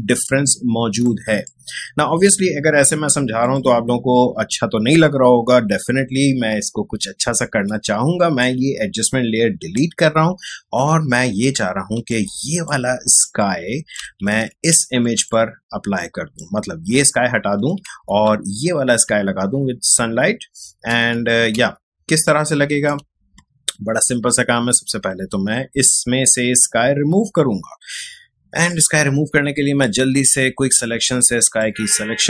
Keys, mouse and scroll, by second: 0.0 ctrl+space, 0.2 ctrl+click, 0.5 ctrl+space, 1.4 click, 1.6 space, 3.4 click, 8.4-11.3 drag, 11.3 ctrl+Tab, 11.9 space, 12.1 click, 12.1 click, 12.5 space, 13.4 click, 13.5 space, 14.3 ctrl+Tab, 14.7 space, 15.0 click, 15.3 click, 15.3 space, 15.4 space, 17.9 ctrl+Tab, 18.3 space, 20.0 Tab, 20.9 ctrl+Tab, 21.5 Tab, 22.1 space, 22.2 click, 22.6 space, 28.7-32.2 drag.